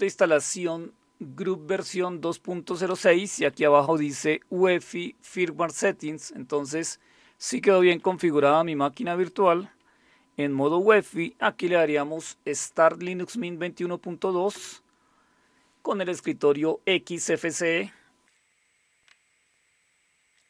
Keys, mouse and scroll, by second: 2.9 Down, 3.1 Down, 3.3 Down, 3.5 Down, 3.7 Down, 7.8 Up, 8.0 Up, 8.2 Up, 8.4 Up, 14.5 Return.